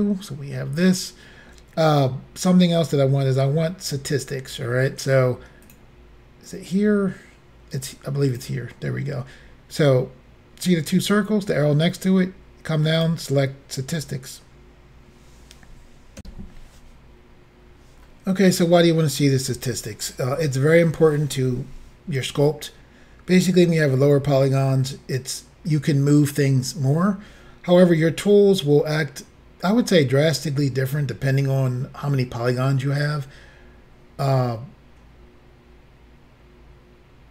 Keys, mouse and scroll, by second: 5.7 click, 8.3 click, 13.0 click, 16.2 Insert.